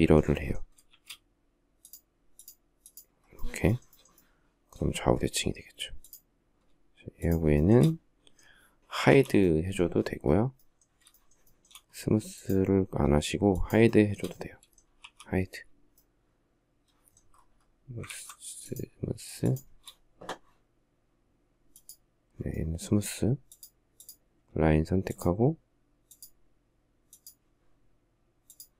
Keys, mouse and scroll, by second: 0.5 shift+x, 6.8 shift+click, 7.2 shift+middle click, 8.7 h, 10.7 shift+middle click, 11.2 shift+double middle click, 13.1 shift+click, 13.5 shift+middle click, 14.6 h, 17.7 ctrl+z, 19.1 shift+click, 24.7 shift+click, 25.7 shift+click, 26.7 shift+click, 28.1 shift+click.